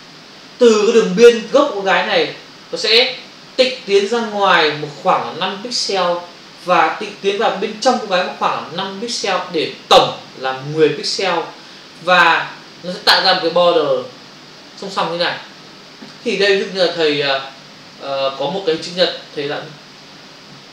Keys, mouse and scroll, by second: 20.0 click.